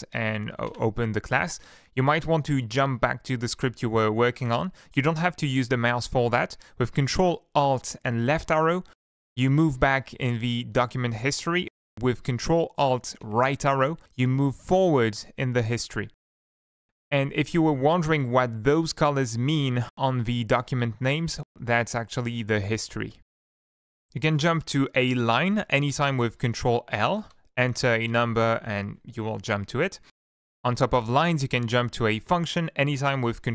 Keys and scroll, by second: 0.3 Down, 0.7 shift+F1, 8.3 ctrl+alt+Left, 13.6 ctrl+alt+Right, 16.5 ctrl+alt+Left, 25.7 ctrl+l, 27.2 typing, 28.1 Return, 30.0 typing.